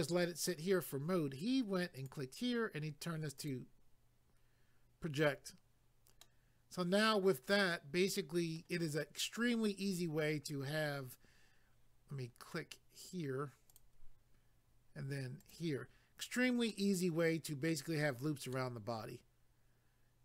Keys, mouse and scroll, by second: 1.9 click, 3.4 click, 6.2 middle click, 13.7 click, 15.4 click, 16.7 middle click, 18.5 middle click.